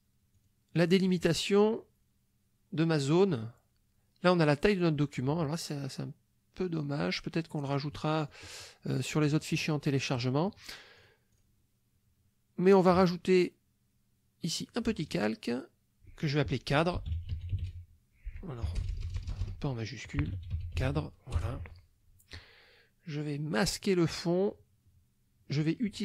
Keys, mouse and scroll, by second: 0.3 click, 0.9 click, 7.9 middle click, 9.9 click, 11.0 click, 11.3 click, 14.6 click, 16.7-18.8 typing, 18.7 Caps_Lock, 20.0-21.4 typing, 23.7 click.